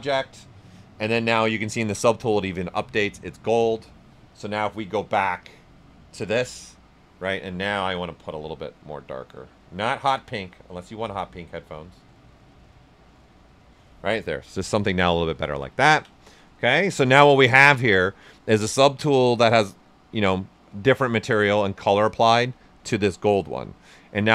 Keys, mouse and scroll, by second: 4.3 click, 7.5 typing, 7.8-14.3 drag, 14.3 right click, 15.7 ctrl+right click, 16.8 shift+f, 17.2 right click, 20.3 typing.